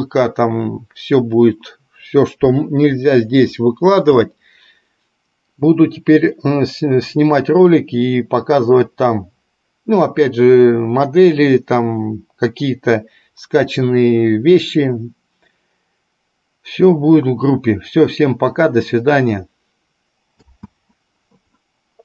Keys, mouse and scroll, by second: 20.8 space.